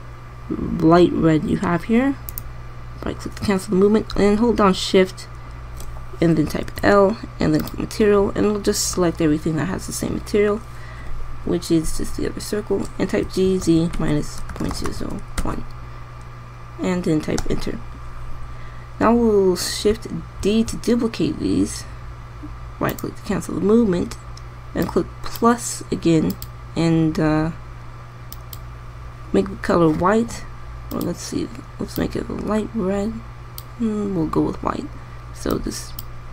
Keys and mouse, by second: 7.4 shift+l, 9.1-9.6 middle drag, 14.0 g, 21.3 shift+d, 28.9-31.8 middle drag.